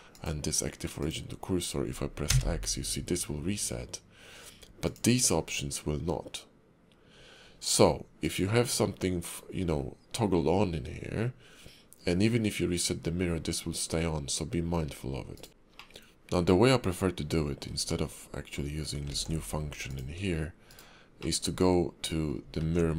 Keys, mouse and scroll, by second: 0.1 click, 4.8 click, 15.5 shift+middle click, 15.5 scroll down 2, 15.9 middle click, 19.1 alt+x, 19.9 click, 21.3 middle click, 22.6 ctrl+`.